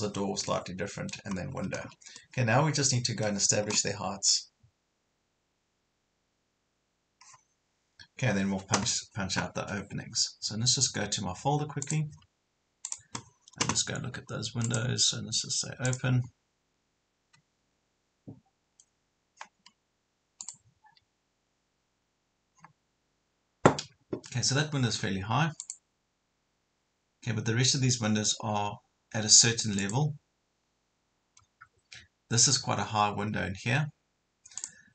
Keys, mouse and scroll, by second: 0.1 scroll up 1, 0.5 middle click, 1.4 scroll up 1, 1.6 Escape, 1.8 scroll down 1, 2.2-3.6 middle drag, 8.1-11.7 scroll up 1, 11.8 click, 13.2 click, 14.7 right click, 15.9-34.9 drag.